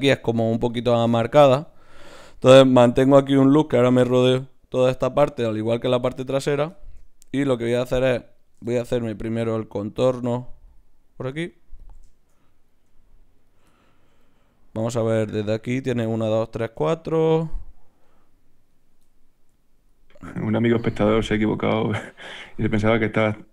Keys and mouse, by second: 7.5 ctrl+Tab, 8.4-15.1 drag, 9.9 right click, 15.1-18.0 middle drag, 18.0-21.6 right drag, 19.8-23.2 drag, 20.4-21.6 middle drag, 22.4 ctrl+z, 22.6 ctrl+z, 23.2 ctrl+z, 23.2 middle click.